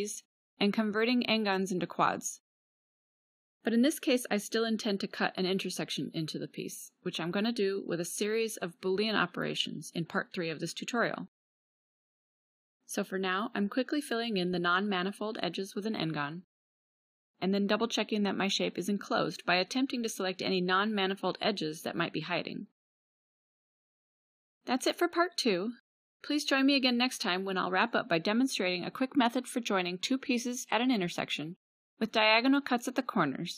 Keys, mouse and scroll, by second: 0.7 middle click, 1.6 middle click, 2.2 middle click, 2.8 1, 5.0 KP_Decimal, 8.7 f, 10.4 middle click, 13.5 click, 14.3 KP_Decimal, 15.4 middle click, 15.6 middle click, 17.8 middle click, 18.6 f, 19.5 right click, 20.4 a, 23.4 a, 24.7 KP_Decimal.